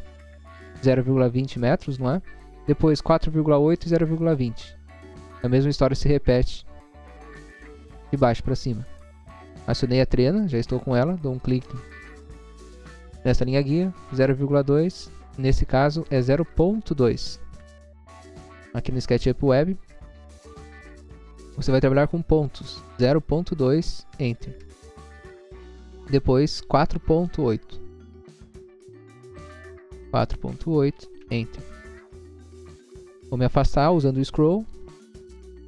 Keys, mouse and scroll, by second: 8.3 click, 11.4 click, 14.1 typing, 15.8 BackSpace, 16.4 BackSpace, 17.6 typing, 24.6 Return, 25.9 click, 29.3 4, 29.9 ., 30.9 8, 31.3 Return, 31.8 scroll down 1, 32.5 scroll down 1, 34.8 scroll up 1, 35.3 scroll up 1.